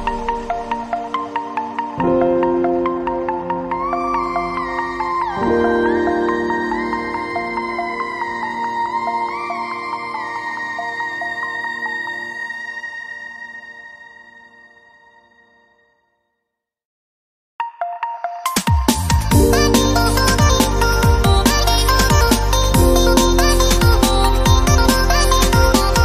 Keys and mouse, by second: 0.0-0.8 typing, 3.7 shift+a, 4.4 middle click, 5.4 click, 5.4 r, 6.6 click, 7.0 middle click, 7.3 click, 8.1 s, 8.8 click, 10.0 middle click, 10.5 z, 10.7 click, 11.9 middle click, 12.8 click, 12.8 z, 13.1 a, 18.8 click, 19.1 n, 19.4 click, 19.7 middle click, 22.2 click, 23.4 ctrl+KP_Add, 24.6 u, 25.0 g, 25.2 click, 25.4 g.